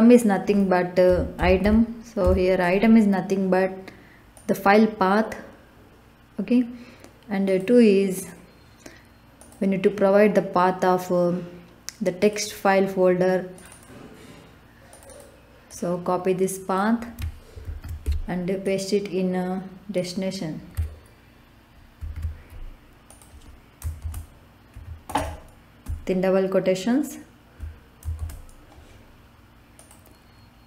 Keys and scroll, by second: 0.8-2.2 typing, 17.6 ctrl+c, 22.0 ctrl+v, 24.0 shift+', 24.7 Right, 25.1 BackSpace, 25.8 Left, 28.1 shift+'.